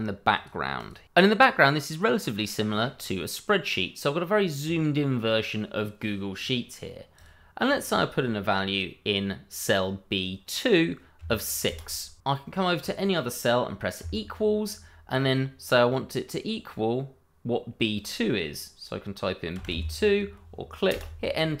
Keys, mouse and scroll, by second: 6.4 click, 10.1 click, 11.2 6, 11.8 Return, 12.8 click, 19.7 2, 21.1 Return.